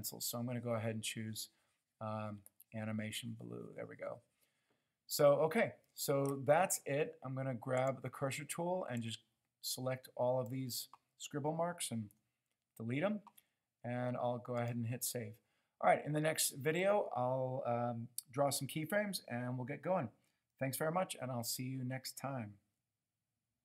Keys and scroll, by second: 12.3 Delete.